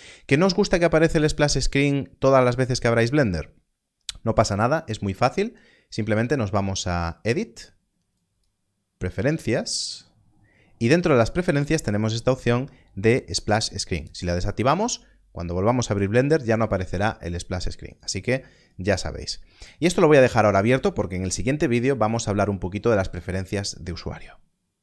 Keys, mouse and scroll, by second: 6.2 click, 17.9 click.